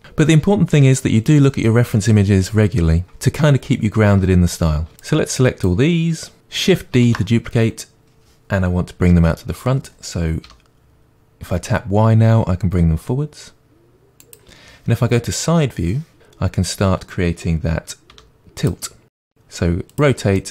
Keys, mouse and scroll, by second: 0.0 shift+click, 5.0 click, 7.0 shift+d, 14.3 click, 15.6 KP_3, 16.2-18.7 shift+middle drag, 18.1 r, 18.9-19.9 drag, 19.2 r, 20.4-20.5 middle drag.